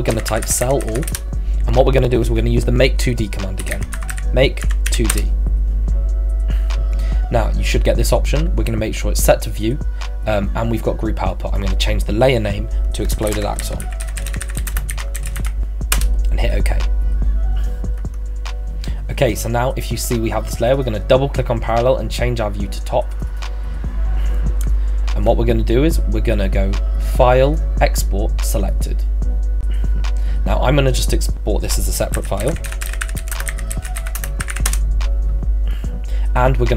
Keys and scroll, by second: 0.0-1.3 typing, 3.4-5.4 typing, 13.0-15.9 typing, 15.9 Return, 31.9-35.0 typing.